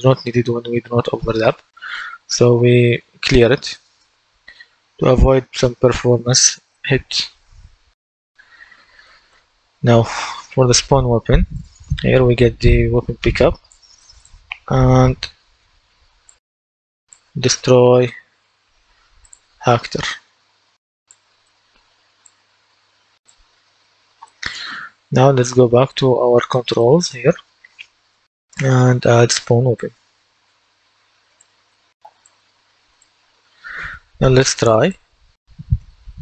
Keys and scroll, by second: 18.0-19.1 typing.